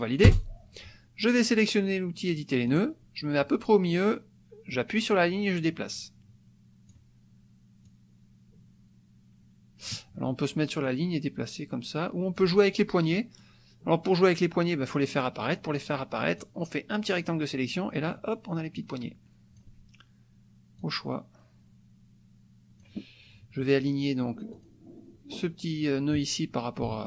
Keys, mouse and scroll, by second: 0.3 Return, 2.7 click, 5.4-7.1 drag, 7.8-10.1 drag, 10.8-12.6 drag, 13.1 middle click, 16.4-17.4 drag, 18.8 click, 20.8-23.0 drag, 23.8 click, 24.6 click.